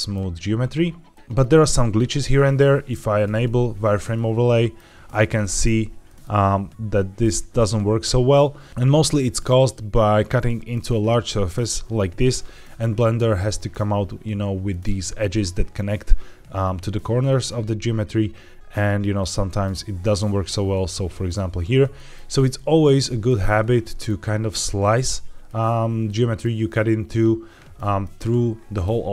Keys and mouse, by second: 1.1 shift+middle click, 4.0-4.7 middle drag, 5.2-5.5 shift+middle drag, 5.9 middle click, 18.7 middle click, 19.1-19.5 shift+middle drag, 21.8 shift+middle drag, 22.4 middle click, 22.9 shift+middle drag, 23.5 middle click, 25.0-25.4 shift+middle drag, 25.9-26.3 middle drag.